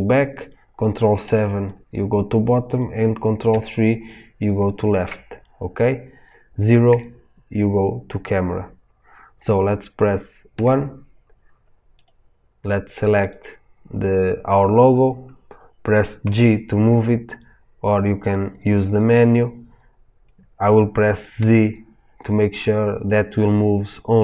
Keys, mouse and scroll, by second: 1.2 ctrl+KP_7, 3.5 ctrl+KP_3, 6.0-7.1 middle drag, 6.8 KP_0, 10.5 KP_1, 11.3-12.0 middle drag, 12.0 click, 16.2 g.